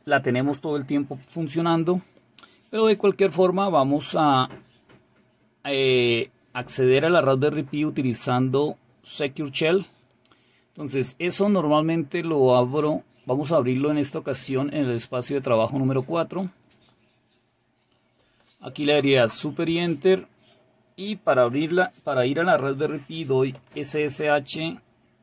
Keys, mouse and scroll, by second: 15.7 click, 23.6 typing.